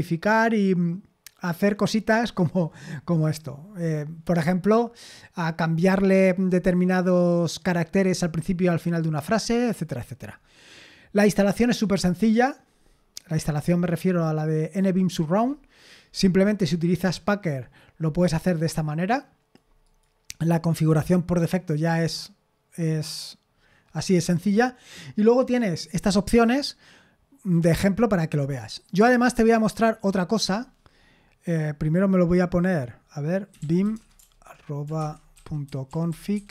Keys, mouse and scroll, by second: 10.3-10.9 scroll down 2, 11.9-13.4 scroll up 2, 13.4-14.9 scroll up 2, 14.9-16.4 scroll down 3, 18.6-20.2 drag, 21.8-22.7 scroll down 2, 22.7-23.1 scroll down 1, 29.5 click, 33.3-36.5 typing.